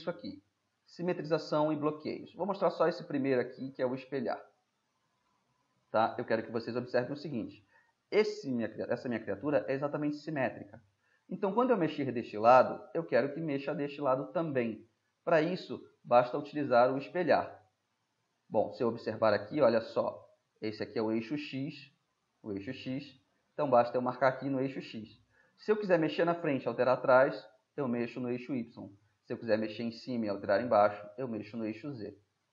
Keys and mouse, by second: 0.0-1.3 middle drag, 3.1-4.3 middle drag, 4.5-5.0 middle drag, 10.3-11.5 middle drag, 13.8-17.8 middle drag, 29.2-31.3 middle drag, 32.3-32.5 middle drag.